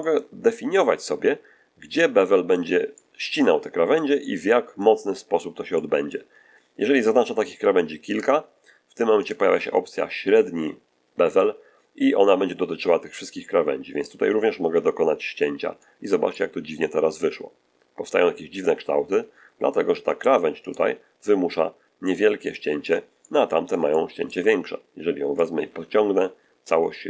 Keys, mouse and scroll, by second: 2.9-4.1 middle drag, 4.9-5.5 scroll up 1, 5.7 shift+middle click, 8.0 right click, 9.1 shift+right click, 14.0-15.9 drag, 16.2-19.8 middle drag, 20.6 right click, 21.9-22.9 middle drag, 23.1-24.4 middle drag, 25.3-26.8 drag.